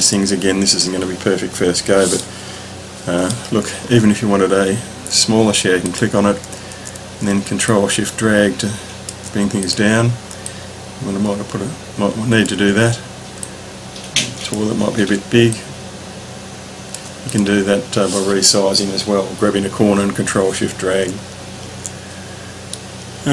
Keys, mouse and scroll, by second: 0.0 click, 1.1-2.2 ctrl+scroll down 3, 2.2-3.4 middle drag, 3.9-4.7 ctrl+scroll up 2, 5.1-5.5 scroll up 1, 5.8 click, 7.8 ctrl+shift+click, 10.6-12.4 drag, 13.5 click, 15.5 ctrl+shift+click, 21.3-22.7 ctrl+scroll down 3, 22.8 middle click.